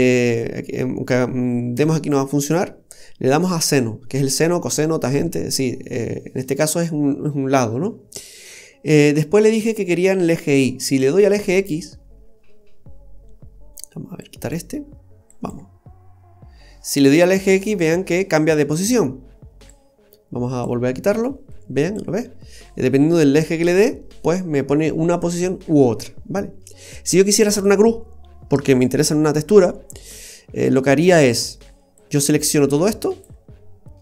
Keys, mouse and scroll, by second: 11.0 click, 14.4 click, 19.7 click, 21.5 click, 25.9-26.4 scroll down 1, 30.4-30.7 scroll down 2, 30.7 middle click, 32.0 click.